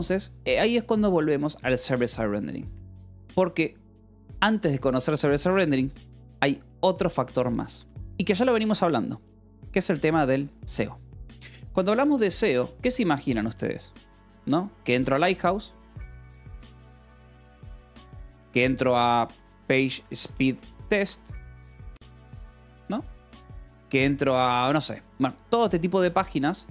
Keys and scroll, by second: 0.3 k, 0.9 j, 2.6 Escape, 3.6 k, 4.6 o, 5.9 Return, 6.9 Escape, 7.2 k, 7.6 a, 7.8 Return, 10.3 space, 10.5 Escape, 11.1 o, 11.5 Escape, 12.0 a, 12.4 Return, 12.7 Escape, 13.3-20.9 typing, 17.8 Escape, 22.5 o, 23.1 :, 23.4 space, 24.8 BackSpace, 25.4 Escape, 26.2-26.7 typing.